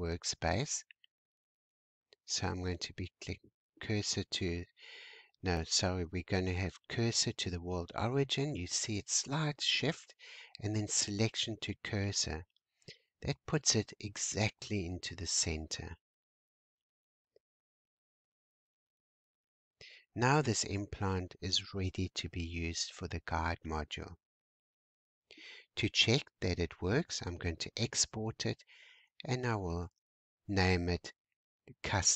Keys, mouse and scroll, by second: 4.9 shift+s, 8.7 shift+s, 11.4-11.8 scroll down 4, 11.9 shift+scroll up 1, 12.0 shift+middle click, 12.4 shift+scroll up 2, 12.7 scroll down 1, 12.7 middle click, 13.3-14.7 scroll down 2, 18.4 scroll up 1, 19.5-20.8 scroll down 2, 20.8-23.9 shift+middle drag, 23.9-24.3 scroll down 1, 27.4-30.5 drag.